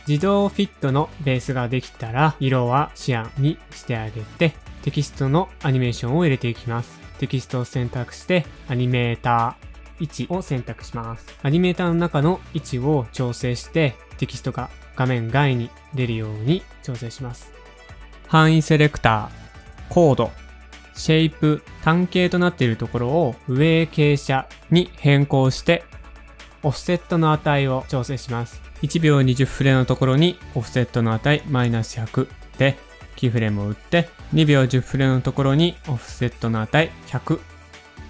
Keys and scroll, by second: 3.1 Return, 16.4-17.2 typing, 21.0 typing, 22.9-23.6 typing, 25.2 shift+super+a, 25.2 Return, 25.2 typing, 29.0-29.7 typing, 31.2 shift+Page_Down, 31.5 shift+Page_Down.